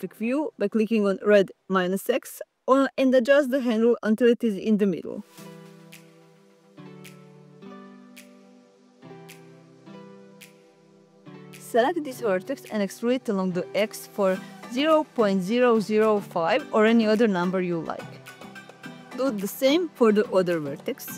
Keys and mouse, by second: 0.8 click, 2.4 click, 6.0 g, 6.1 z, 8.7 click, 9.3 click, 10.6 ctrl+z, 13.2-15.4 typing, 15.8 Return, 20.1 click, 20.5 click.